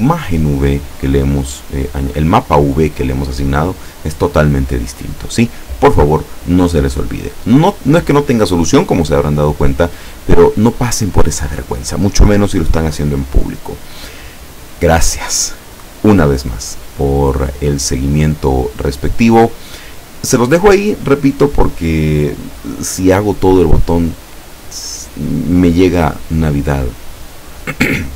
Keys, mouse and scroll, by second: 13.6 click, 15.3 click, 16.7-19.6 middle drag, 19.6-20.2 scroll down 1.